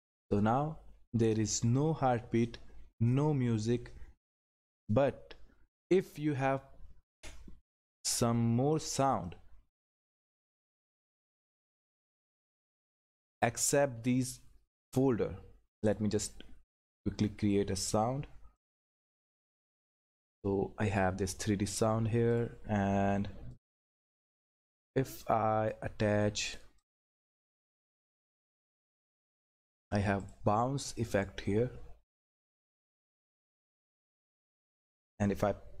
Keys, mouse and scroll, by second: 15.8 click, 18.5 click, 22.3-26.4 drag, 30.7-32.0 scroll down 1, 32.0 click.